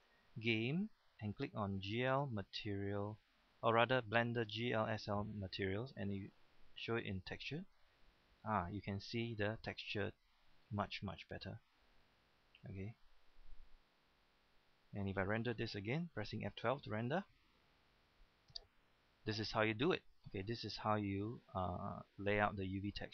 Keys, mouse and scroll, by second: 16.4 F12.